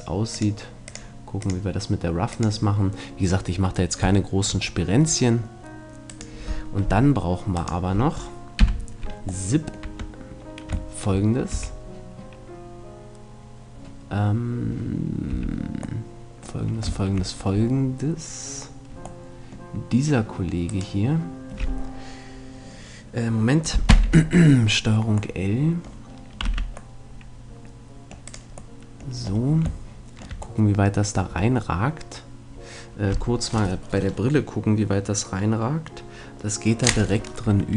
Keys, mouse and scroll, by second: 0.4-4.0 drag, 4.2-6.2 middle drag, 6.2-9.3 right drag, 8.6 KP_Decimal, 9.5 middle click, 9.9 Tab, 11.6 a, 15.4 a, 19.2 middle click, 23.9 ctrl+l, 24.7 middle click, 26.5 c, 28.4-29.0 scroll up 1, 29.0-31.0 middle drag.